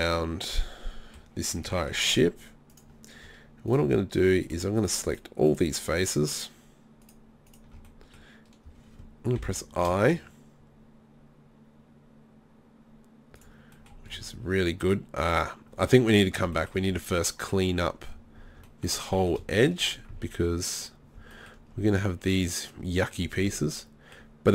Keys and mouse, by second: 0.1 middle click, 0.3 middle click, 0.6 middle click, 0.8 middle click, 1.2 middle click, 7.9 middle click, 13.4 click, 13.7-19.1 middle drag.